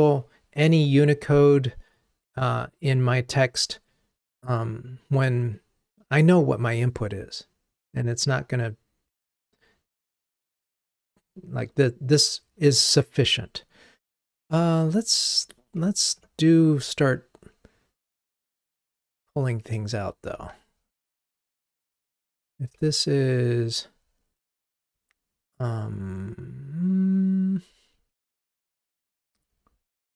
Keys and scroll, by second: 15.2 alt+Up, 15.9 alt+Up, 21.9 alt+super+v, 28.8 super+z.